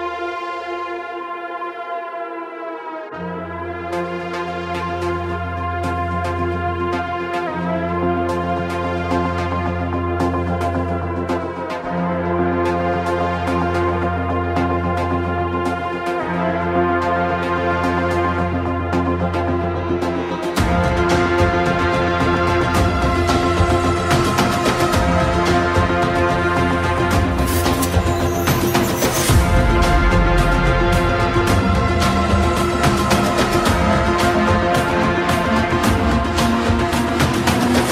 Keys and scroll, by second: 3.2 alt+space, 4.6 space, 10.4 ctrl+alt+z, 15.1 ctrl+shift+z, 25.8 shift+/, 28.5 Home, 28.6 space, 31.2 space, 32.0 space.